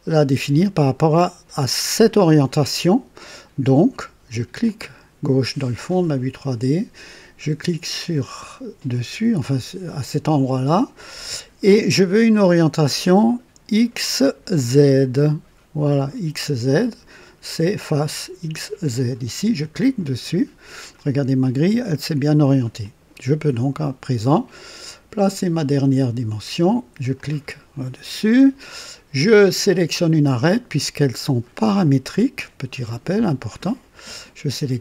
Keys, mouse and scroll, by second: 3.6-4.3 drag, 4.6 click, 7.9 click, 11.9-13.1 drag, 15.9 click, 19.8 click, 21.0-21.9 drag, 22.8-24.4 drag, 27.1 click, 32.0 click.